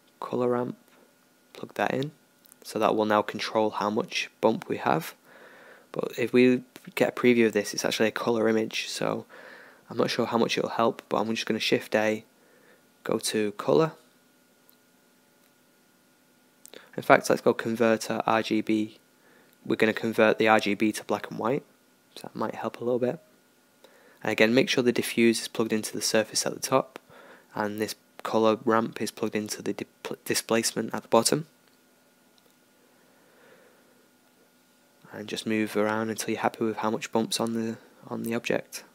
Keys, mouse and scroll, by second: 2.8-38.9 drag, 2.8 shift+a, 10.4 shift+a.